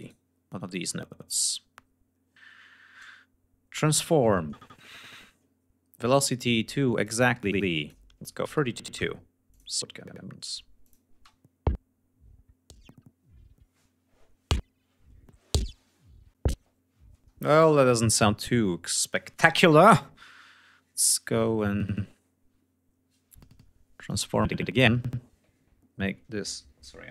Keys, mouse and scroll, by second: 3.4 click, 5.2 click, 6.1 click, 6.7 click, 7.6 3, 8.5 click, 10.0 click, 10.1 space, 16.9 space, 17.1 right click, 23.6 click.